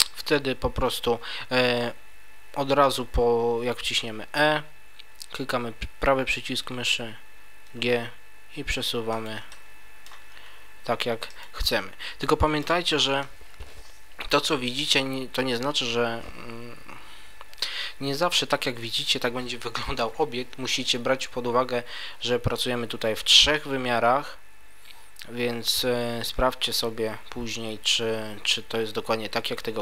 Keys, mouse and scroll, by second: 7.7 g, 9.2 click, 9.5 middle click, 10.3 g, 11.4 click, 11.7 middle click, 14.3-15.7 scroll down 1, 20.7 middle click.